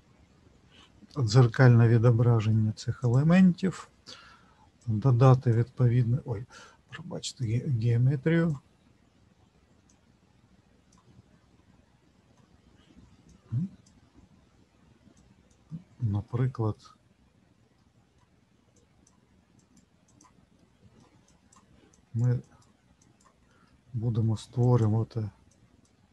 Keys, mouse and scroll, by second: 3.0 click, 4.8 click, 13.3 click, 15.1 click, 16.2 middle click, 17.8 middle click, 18.7 click, 19.6 click, 20.0 click, 20.5 middle click, 21.3 click, 21.9 click, 23.6 middle click, 24.6 click.